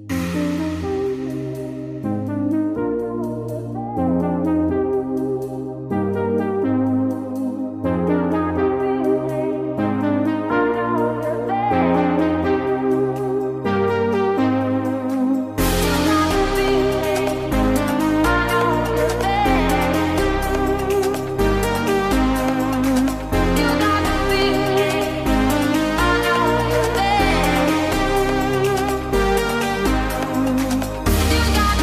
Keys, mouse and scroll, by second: 8.8 click, 11.5-26.0 drag, 28.8 click.